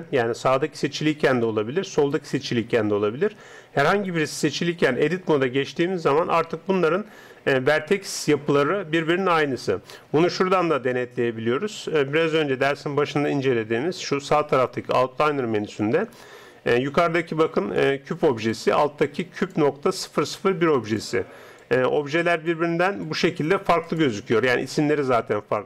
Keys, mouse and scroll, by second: 0.6 Tab, 1.5 Tab, 2.0-6.1 right drag, 2.4 Tab, 2.9 Tab, 4.3 Tab, 17.7-25.6 drag.